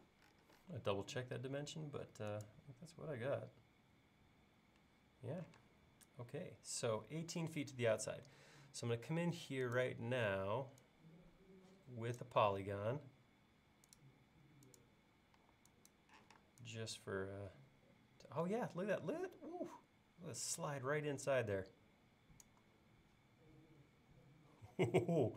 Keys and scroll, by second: 1.0 l, 5.6 space, 15.4 e.